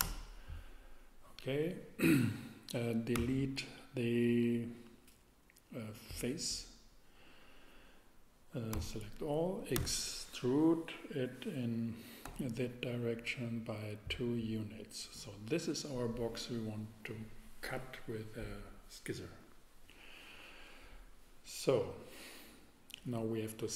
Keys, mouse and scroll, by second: 0.0 Return, 3.1 x, 8.7 a, 9.7 a, 9.7 e, 9.8 e, 12.2 z, 14.1 click.